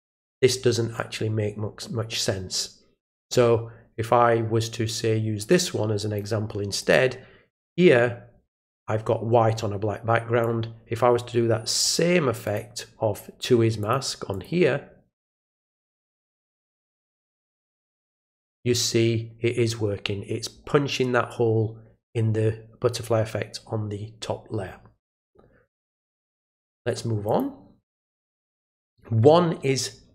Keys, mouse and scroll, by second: 0.2 click, 5.5-6.1 drag, 6.8 click, 10.4-11.8 drag, 12.4 click, 13.8 click, 14.3 click, 16.0 click, 17.6 click, 26.2 click, 27.2 click.